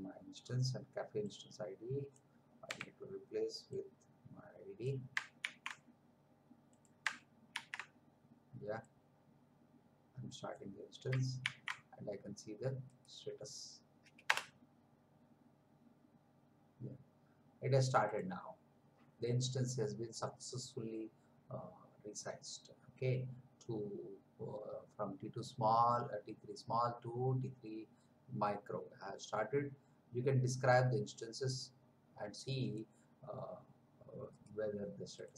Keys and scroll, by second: 2.7 Delete, 5.3 ctrl+c, 7.5 ctrl+v, 11.3 ctrl+c, 14.2 Return.